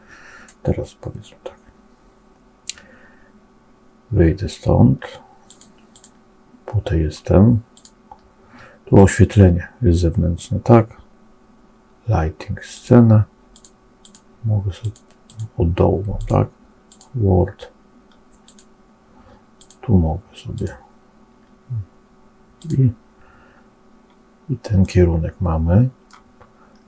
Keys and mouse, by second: 5.8 click, 7.6-21.2 drag, 22.5 click, 24.7-26.0 middle drag.